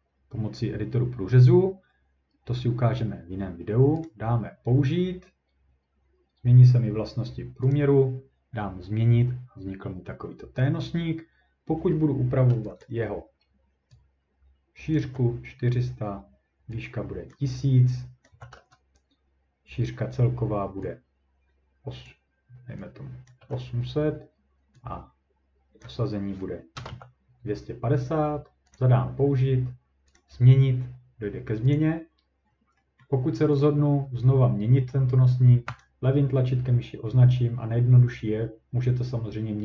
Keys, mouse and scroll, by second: 4.1 click, 7.7 click, 8.5 scroll down 1, 8.6 scroll, 12.8 click, 14.9 click, 15.0 4, 17.3 click, 18.3 click, 18.3 typing, 22.0 click, 23.2-23.9 typing, 23.3 click, 25.8 click, 26.7 BackSpace, 26.9 BackSpace, 28.8 click, 30.2 click, 31.7 click, 32.5-32.8 scroll, 33.0 scroll, 33.6 click, 34.2-34.6 scroll, 35.3-35.8 scroll down 2, 35.8 click.